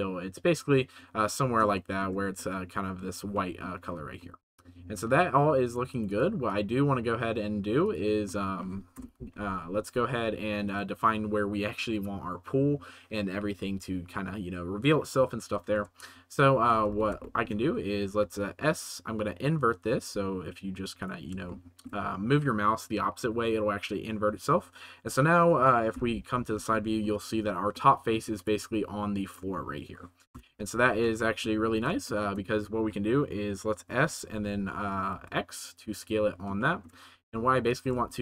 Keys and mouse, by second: 1.8 shift+middle drag, 2.3-2.9 middle drag, 3.3-3.6 middle drag, 4.3 middle click, 6.1 click, 6.5 click, 8.2-8.5 middle drag, 8.9 KP_0, 9.8 s, 16.6 middle click, 16.9 ctrl+s, 17.2 middle click, 18.2 ctrl+s, 19.8 c, 20.9 middle click, 21.5-21.8 shift+middle drag, 25.9 KP_1, 26.8 shift+middle drag, 27.7-28.1 middle drag, 28.3 middle click, 30.3 KP_0, 31.4 middle click, 31.7 ctrl+s, 32.1-32.4 shift+middle drag, 33.8 s, 34.3 y, 35.1 x, 35.9 click, 36.5 shift+middle drag, 37.0 s, 37.6 right click, 37.8 g, 38.0 shift+z.